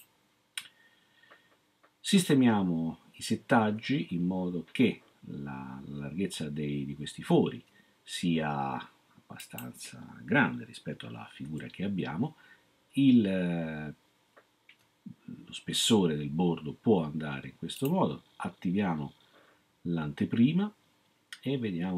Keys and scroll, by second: 11.4 0.